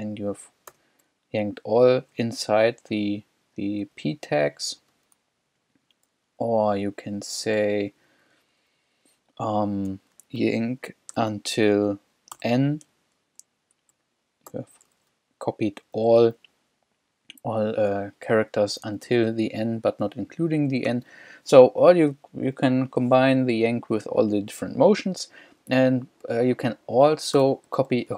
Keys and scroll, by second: 0.7 shift+p, 2.2 j, 4.0-6.1 typing, 7.6 h, 10.4 y, 11.2 t, 12.4 n, 14.0 h, 14.5 shift+p, 16.1 l, 18.9 l, 20.9 u, 27.4 k.